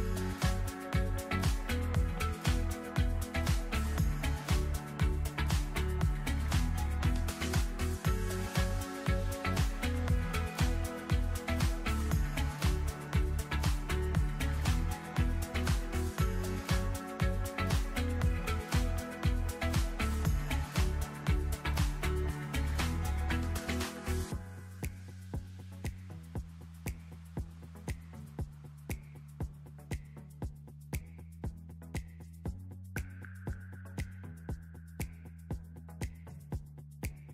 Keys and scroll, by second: 3.5 space, 23.6 space, 25.7 space, 33.5 ctrl+z.